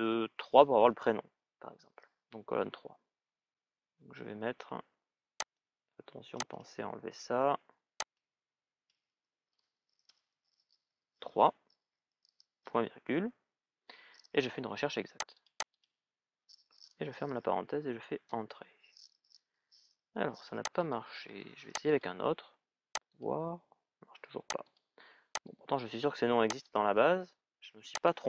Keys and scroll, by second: 10.1 shift+", 18.1 Return.